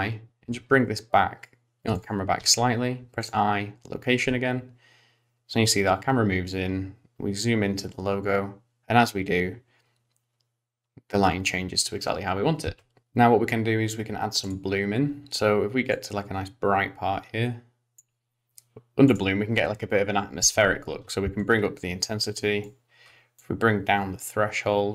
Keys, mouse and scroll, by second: 2.4 i, 4.2 space, 12.7 space, 13.0 click, 14.5 click, 16.0 click, 19.1 click, 21.5 click, 23.4 click.